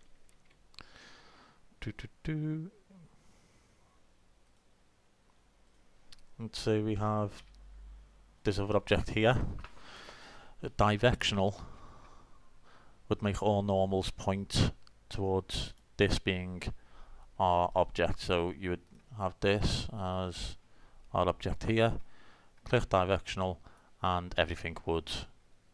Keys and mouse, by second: 0.3 shift+a, 7.0 g, 10.1 click, 10.4 right click, 10.5-11.9 drag, 15.7-17.6 right drag, 17.7-19.7 right drag, 18.9-20.6 drag, 20.9-21.3 middle drag, 21.9 click, 22.5-23.1 drag, 23.1-23.7 middle drag, 23.1 click, 23.4 click, 23.9-25.0 middle drag.